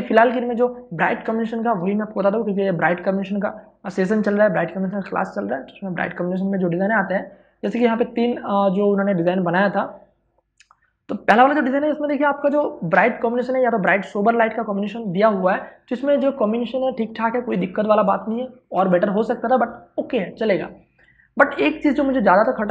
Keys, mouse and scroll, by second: 0.7 click, 6.2 ctrl+click, 11.8 space, 12.1 ctrl+click, 21.3 space, 21.5 ctrl+click.